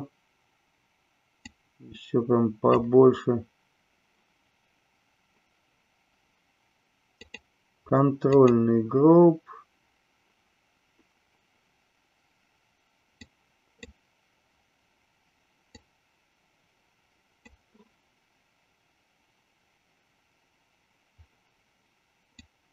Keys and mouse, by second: 1.3-2.8 drag, 7.2-8.5 drag, 13.3 click, 15.6-17.4 drag, 22.4 click.